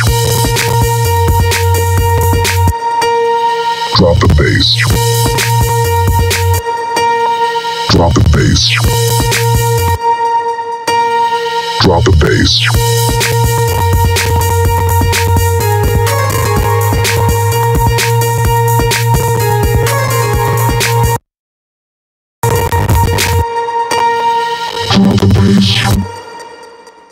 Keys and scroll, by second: 2.3 space, 23.1 space.